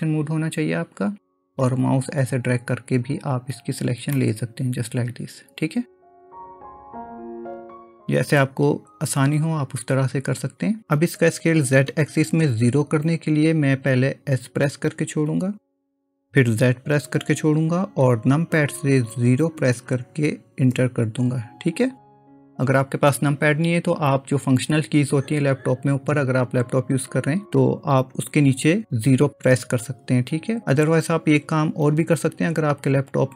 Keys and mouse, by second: 1.6-3.2 drag, 4.2-6.0 middle drag, 7.1 click, 15.3 s.